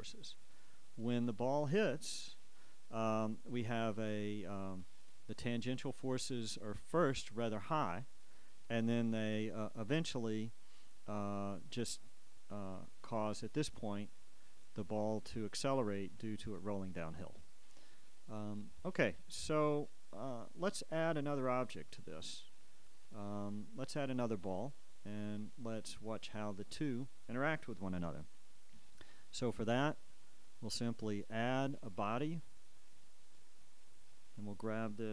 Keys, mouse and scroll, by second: 0.6-2.1 drag, 12.7-14.5 drag, 18.7 click, 19.8 Escape, 22.1-28.5 drag, 28.9 a, 30.9 click, 31.8 click, 33.0 click, 34.3-35.1 drag.